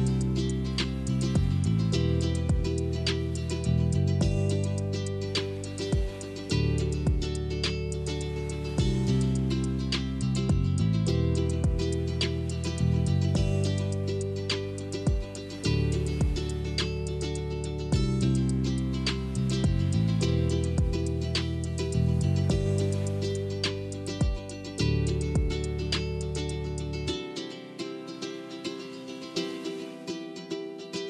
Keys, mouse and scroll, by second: 0.8-1.6 scroll down 6, 1.6-2.2 scroll up 7, 3.0 Tab, 3.5 click, 3.8-6.1 middle drag, 6.1 g, 14.2 Tab, 14.5-16.2 middle drag, 16.2 scroll down 3, 16.9-17.6 scroll up 2, 17.6 Tab, 18.2 middle click, 19.2 g, 23.8 Tab, 24.2 click, 24.6-25.6 middle drag, 25.6 scroll down 2, 25.8-26.6 scroll up 1, 28.2 shift+a, 29.2 scroll down 4, 30.3 click.